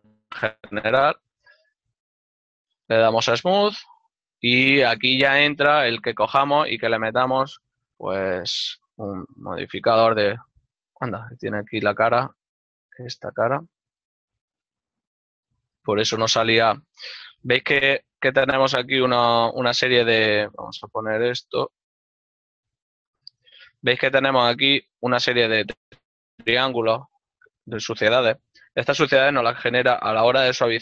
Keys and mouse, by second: 1.3 t, 2.5 Tab, 6.6 click, 11.3 Tab, 14.5 click, 15.0 z, 16.3 right click, 17.9 click, 18.5 z, 19.2 click, 21.3 Tab, 23.1 click, 26.8 Tab, 27.3 shift+middle click.